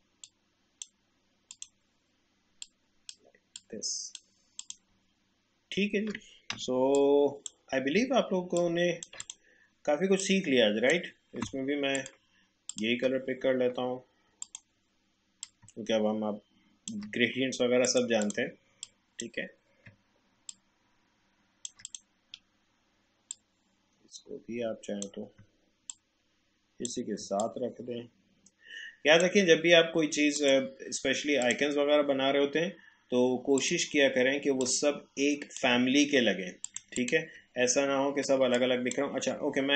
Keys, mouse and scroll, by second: 5.1 alt+scroll down 1, 5.7-6.0 alt+scroll up 1, 6.5 v, 6.9-20.5 drag, 20.5-25.9 shift+drag, 25.9-36.6 shift+drag, 37.6-38.2 alt+scroll up 1, 38.4 space, 38.6 click, 38.9 space, 39.4-39.7 alt+scroll up 1.